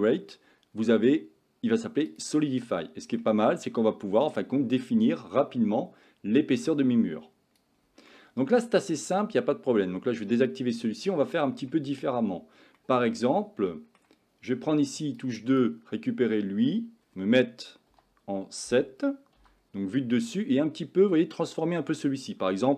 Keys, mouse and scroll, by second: 2.8-3.2 middle drag, 4.4-7.6 drag, 8.1-8.9 middle drag, 10.4 click, 10.9-11.7 middle drag, 12.8-13.1 middle drag, 13.3 Tab, 13.7 middle click, 14.7 2, 15.4 click, 18.0 KP_7, 19.4 g.